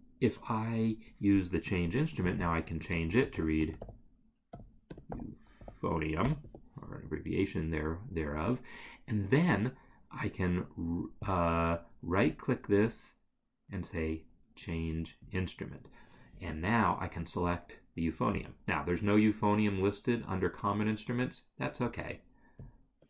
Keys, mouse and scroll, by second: 2.4 double click, 3.1 ctrl+a, 3.8 u, 4.9 BackSpace, 5.1 p, 6.6 Escape, 11.2 click, 12.3 right click, 15.2 click, 18.4 click, 22.6 click.